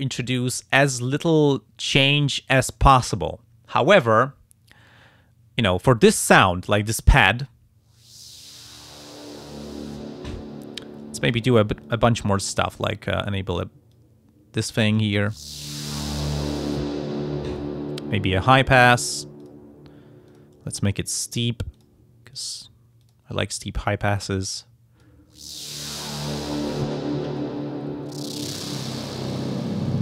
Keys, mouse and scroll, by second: 11.2 click, 11.8 click, 12.8 click, 13.9-15.2 drag, 15.7 click, 17.5 click, 19.4 click, 20.3 click, 21.7 click, 22.3 click, 23.0 click, 24.5 click.